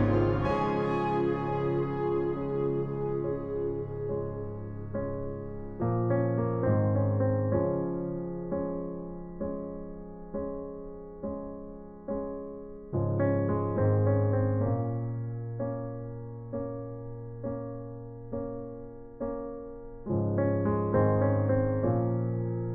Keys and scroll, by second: 1.9 ctrl+alt+g, 2.8 space.